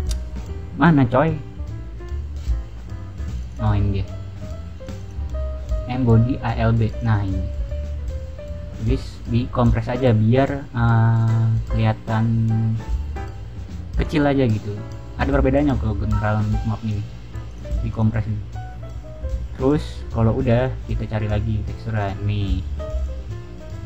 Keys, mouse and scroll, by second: 3.3 click, 3.4 click, 4.7 click, 6.8 click, 9.5 click, 13.9 click, 17.4 click, 17.9 click, 19.7 click, 20.5 click, 20.9 middle click, 21.9 click, 22.9 click.